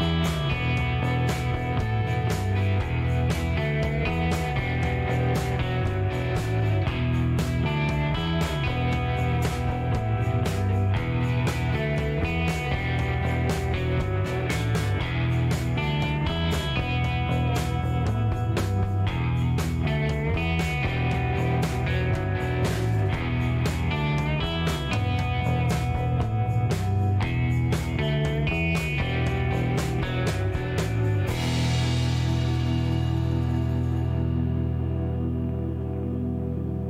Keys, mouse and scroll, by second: 3.3 middle click, 3.8 scroll up 1, 5.1 click, 6.4 click, 8.6 click, 10.6-12.8 drag, 13.3 middle click, 13.9 middle click, 15.2 click, 17.6 click, 19.1 KP_3, 19.6 KP_Enter, 22.7 scroll down 1, 23.1 shift+right click, 24.1 shift+middle click, 24.6 scroll up 2, 25.6 shift+right click, 26.3 shift+middle click, 27.3 shift+right click, 27.9 shift+scroll down 1, 28.2 shift+middle click, 28.6 shift+right click, 29.4 shift+middle click, 30.0 shift+right click, 31.9 shift+scroll down 1, 33.0-33.6 scroll up 4, 35.3 click, 36.1 scroll down 2, 36.4 middle click, 36.7 scroll up 1.